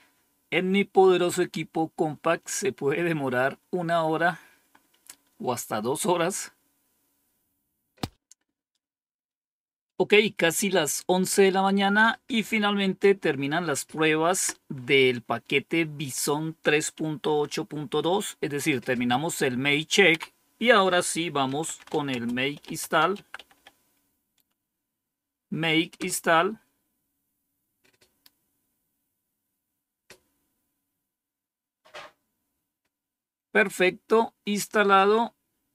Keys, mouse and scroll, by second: 16.0 click, 17.1 Home, 20.0 End, 21.1-23.9 typing, 25.9 Return.